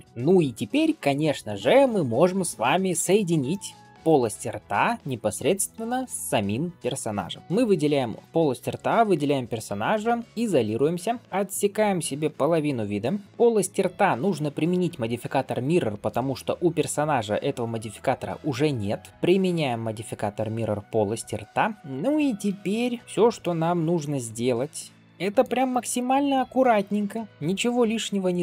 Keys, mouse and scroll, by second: 0.0 shift+middle click, 2.9-3.3 drag, 3.3-3.6 middle drag, 5.2 ctrl+s, 7.4 shift+click, 7.4 scroll down 2, 7.9-8.2 scroll up 1, 10.2-11.2 scroll down 1, 11.2 shift+middle click, 11.2 shift+scroll up 1, 11.3 alt+b, 14.5-15.2 scroll up 2, 15.9-21.8 drag, 21.8 middle click, 21.8 scroll down 1, 22.3 Tab, 23.0 alt+h, 23.1 shift+middle drag, 23.5-23.9 scroll up 1, 23.9-25.4 middle drag, 25.5 shift+middle drag, 26.2-26.7 middle drag, 27.2 scroll up 4, 27.3 alt+1, 27.4 alt+z, 27.9-28.4 scroll up 2.